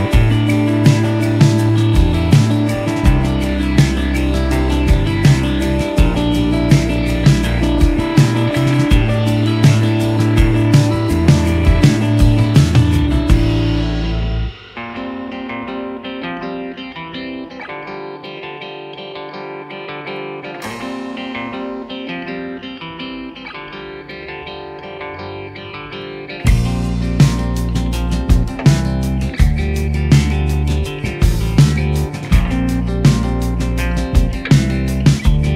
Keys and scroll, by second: 0.9 g, 1.2 z, 1.8 s, 2.8 s, 3.0 z, 5.3 s, 5.4 z, 6.1 s, 6.2 z, 10.9 g, 11.0 y, 12.3 s.